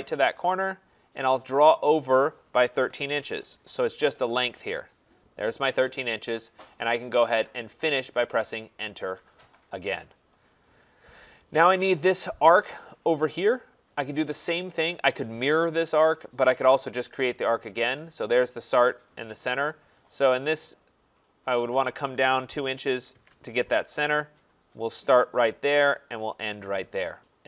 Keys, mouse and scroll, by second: 0.6 click, 2.5-3.9 typing, 9.0 Return, 9.8 Return, 12.0-16.1 drag, 18.5 click, 22.5 2, 23.0 shift+', 23.1 Return, 25.5 click, 26.4 click.